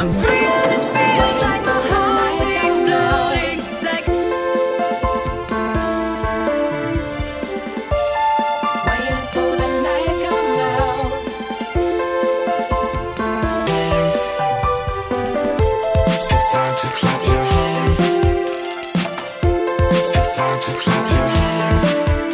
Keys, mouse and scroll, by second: 5.8-9.5 drag, 10.4 click, 10.7 ctrl+c, 11.9 click, 12.2 ctrl+v, 12.5 Return, 14.0 click, 14.4-15.9 typing, 17.2-22.3 drag.